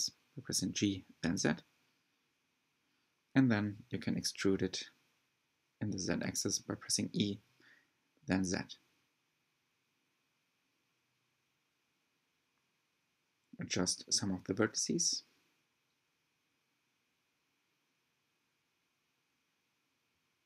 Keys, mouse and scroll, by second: 0.5 click, 1.1 g, 4.2 e, 8.0 e, 10.0 click, 10.2 g, 13.4 click, 13.7 shift+middle click, 14.3 e, 15.7 click, 16.2 g, 17.6 click, 17.8 g, 20.3 click.